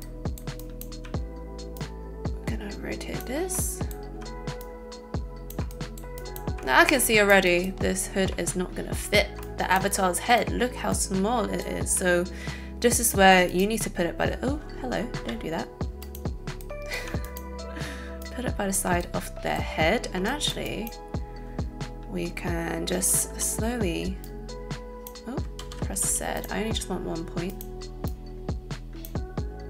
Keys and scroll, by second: 15.1 Escape, 25.6 ctrl+z.